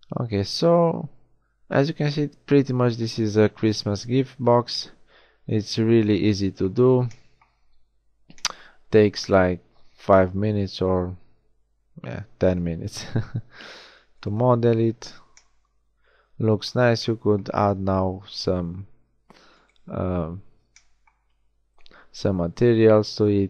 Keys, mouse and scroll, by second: 3.8 KP_1, 6.7 z, 8.0 a, 14.9 z, 15.4-15.8 middle drag.